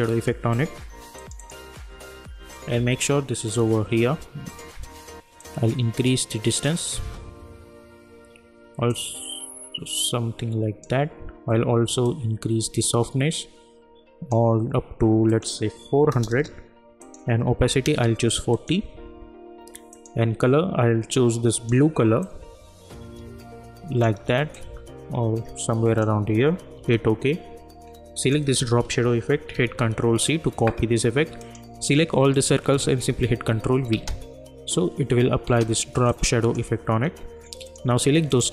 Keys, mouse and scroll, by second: 1.2 click, 5.4-8.8 drag, 8.9-24.5 drag, 9.5-11.1 drag, 24.6-26.8 drag, 26.8 Return, 28.1 click, 29.5 ctrl+c, 31.4 click, 32.3 shift+click, 33.0 ctrl+v, 33.9 space, 36.1-37.6 drag.